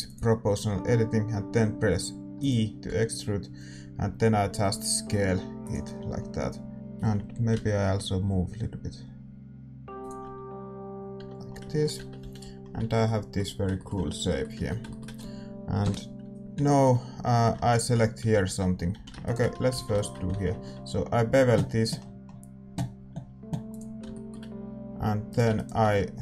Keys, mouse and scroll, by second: 2.3 e, 2.8 s, 6.2 middle click, 7.0 g, 10.4 a, 10.5-18.9 middle drag, 11.1 Tab, 11.9 Tab, 12.2 a, 12.7 Tab, 15.8 KP_7, 17.7-22.9 right drag, 18.9 a, 19.7 a, 20.5 ctrl+b, 24.1-26.2 middle drag, 24.7 a, 25.2-26.2 right drag.